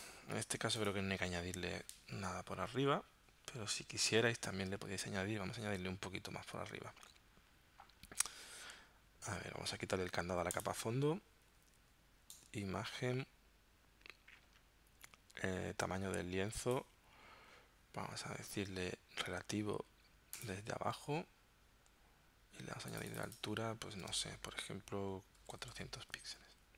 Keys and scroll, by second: 25.4 4, 25.6 0.